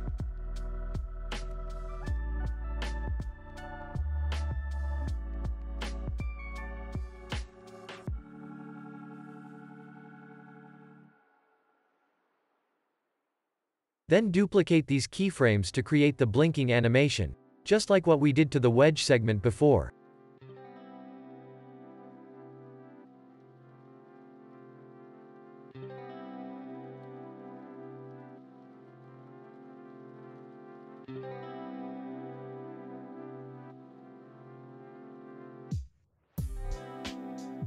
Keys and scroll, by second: 0.6 ctrl+v, 3.4 ctrl+v, 5.2 ctrl+v, 6.8 ctrl+v, 8.3 ctrl+v, 12.0 u, 13.1 x, 14.6 ctrl+s, 15.7 alt+x, 19.3 ctrl+c, 19.6 ctrl+v, 21.8 Delete, 23.2 ctrl+c, 23.4 ctrl+v, 25.0 ctrl+c, 25.2 ctrl+v, 27.1 ctrl+c, 28.8 ctrl+v, 30.9 ctrl+c, 33.5 z, 34.2 ctrl+v, 36.9 ctrl+v.